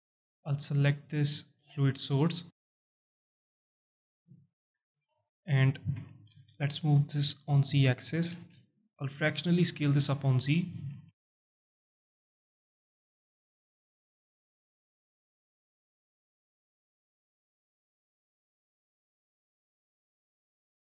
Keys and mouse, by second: 1.4 click, 3.0 click, 4.3 alt+shift+drag, 4.9 s, 5.1 z, 5.9 Escape, 7.0 click, 8.3 s, 8.3 z, 11.8 click, 12.6 g, 12.8 z, 20.6 shift+click.